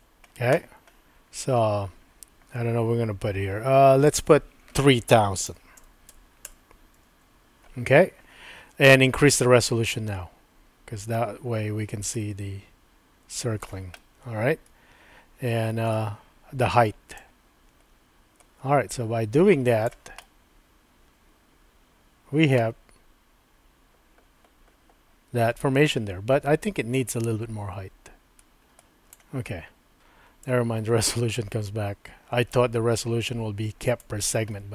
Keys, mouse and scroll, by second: 4.1-7.8 drag, 6.1 KP_0, 9.3-13.6 drag, 14.1-16.0 middle drag, 17.2-19.8 drag, 20.3-22.6 middle drag, 26.9-29.1 drag, 30.4-32.5 drag, 33.9 click, 34.6-34.7 middle drag.